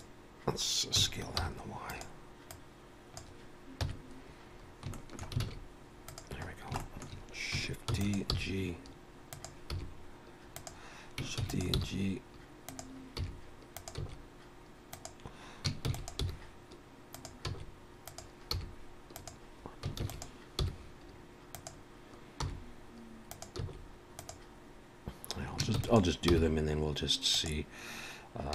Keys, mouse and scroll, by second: 1.0 s, 2.5 click, 3.9 KP_1, 4.7 scroll up 2, 4.9 shift+middle click, 5.4 alt+a, 6.1 click, 6.5 scroll down 3, 6.8 shift+middle click, 7.9 shift+d, 8.3 g, 9.7 r, 11.4 shift+d, 11.8 g, 13.2 r, 14.0 s, 15.9 shift+d, 16.2 g, 17.5 s, 18.5 r, 20.0 shift+d, 20.6 g, 22.4 r, 23.6 s, 25.8 shift+d, 26.3 g.